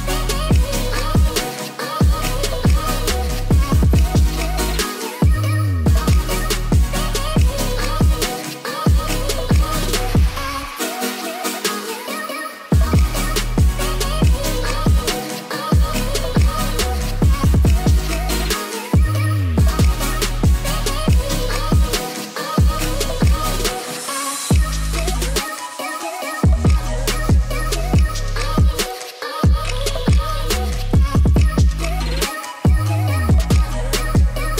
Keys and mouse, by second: 2.8 s, 4.5 s, 7.6 Tab, 7.6-7.9 drag, 8.1 shift+z, 8.4 click, 8.5 drag, 8.8 shift+drag, 9.2 click, 10.3 middle click, 10.5 Tab, 10.8 click, 11.7 middle click, 11.9 click, 12.9 middle click, 13.3 KP_7, 14.6 w, 17.0 middle click, 17.8 middle click, 18.4 shift+z, 18.8 KP_7, 21.7 click, 21.9 middle click, 22.2 shift+middle click, 22.4 middle click, 22.8 shift+z, 23.0 shift+click, 23.2 click, 25.7 o, 26.4 z, 33.9 click, 34.0 Tab, 34.2-34.5 middle drag.